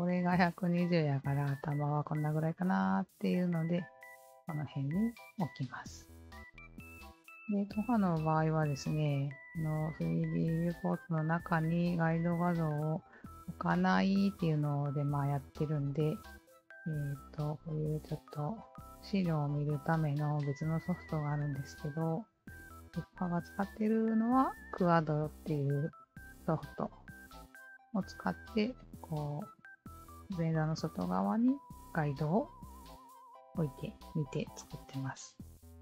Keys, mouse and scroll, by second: 2.5-3.3 alt+drag, 3.5 alt+click, 3.9-5.8 alt+drag, 6.4 alt+right click, 6.4 alt+click, 6.8 alt+click, 7.4 click, 7.4 alt+right click, 7.8 click, 8.7 alt+middle click, 9.0 alt+click, 12.5 alt+click, 17.0-21.6 alt+drag, 24.2 alt+click, 24.7-28.0 alt+drag, 30.1-35.8 alt+drag.